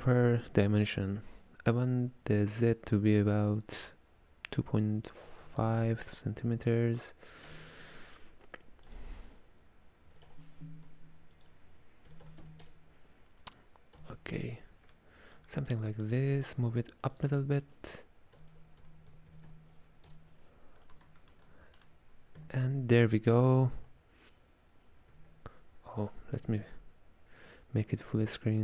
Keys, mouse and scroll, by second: 8.9-14.1 drag, 14.1 KP_Decimal, 15.0-17.2 middle drag, 17.2-20.2 drag, 21.3-24.2 ctrl+middle drag, 25.2 alt+F11, 28.1 click.